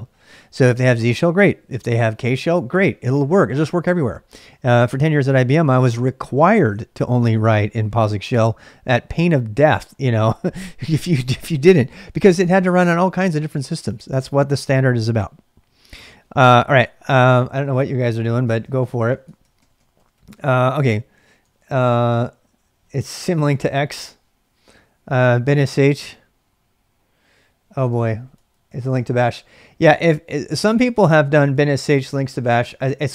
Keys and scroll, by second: 12.8 ctrl+[, 12.9-14.7 typing, 17.1-22.8 typing, 27.6-31.5 typing, 31.3 ctrl+[.